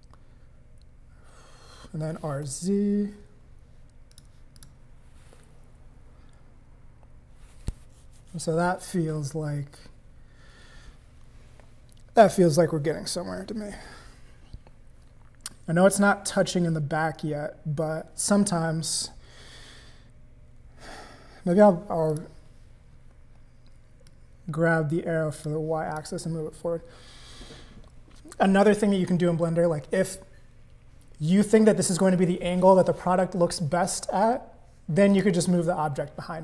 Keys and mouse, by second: 2.0 r, 4.6 click, 5.0 middle click, 5.5 middle click, 6.8 middle click, 16.8-20.2 middle drag, 22.1 click, 24.1-26.0 drag, 35.1 click.